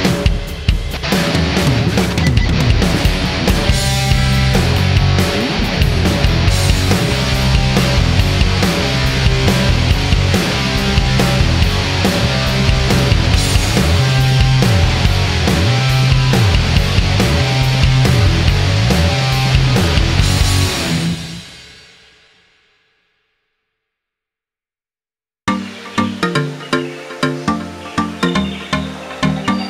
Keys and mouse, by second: 0.1 click, 9.3-10.1 middle drag, 10.7-11.8 middle drag, 17.3 click, 21.8 g, 24.6-25.2 middle drag, 25.7-26.6 middle drag, 26.9 middle click.